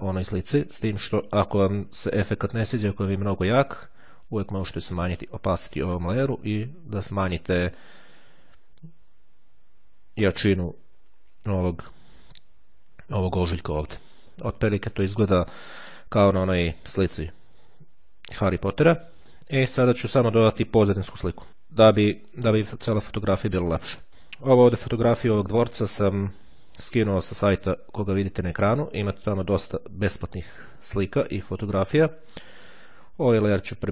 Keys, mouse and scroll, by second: 4.3-11.2 drag, 19.4-20.5 drag, 21.5 click, 22.4 click, 22.9 middle click, 26.9-29.7 drag, 31.9 click.